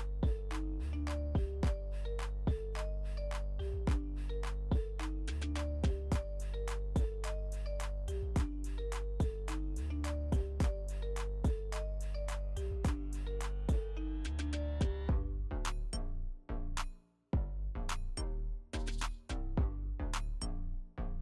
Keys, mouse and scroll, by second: 2.1 ctrl+a, 3.3 ctrl+z, 6.5 ctrl+v, 7.2 alt+w, 9.4 right click, 10.6 click, 12.8 ctrl+t, 14.1-16.9 drag, 16.9-17.2 alt+scroll up 1, 18.8-20.7 ctrl+drag.